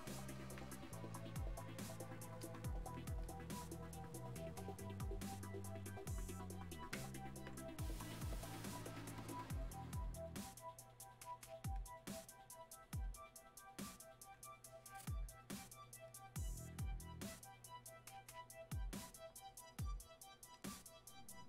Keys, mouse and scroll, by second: 19.9 click.